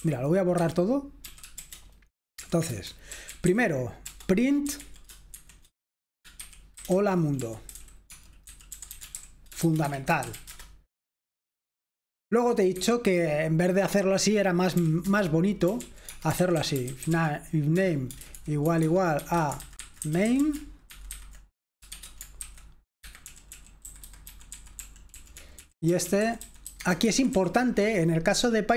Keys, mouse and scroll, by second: 0.0-5.3 typing, 0.6 Escape, 2.7 Return, 6.6-11.4 typing, 10.5 Return, 11.4 F5, 13.0 Escape, 14.8-27.8 typing.